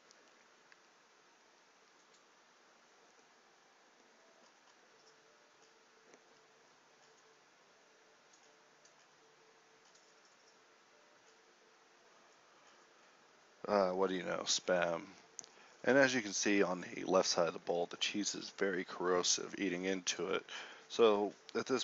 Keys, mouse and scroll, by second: 0.2 [.